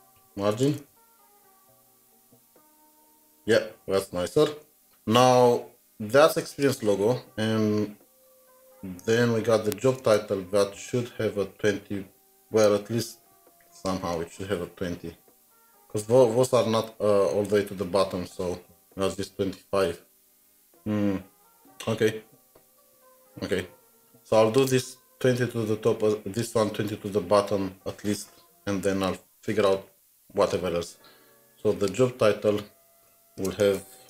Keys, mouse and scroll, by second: 0.0-1.4 typing, 7.2 typing, 7.4 scroll down 1, 10.0 scroll down 1, 10.0 alt+Tab, 29.5 alt+Tab, 33.0 scroll down 1, 33.0 Return, 33.4 Return, 33.6-34.0 typing.